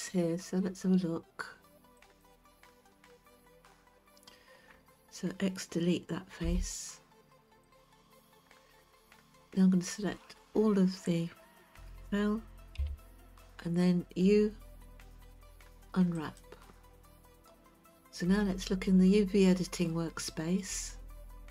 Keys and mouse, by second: 2.1 click, 6.4 x, 9.2-10.4 middle drag, 12.8 a, 15.3 u.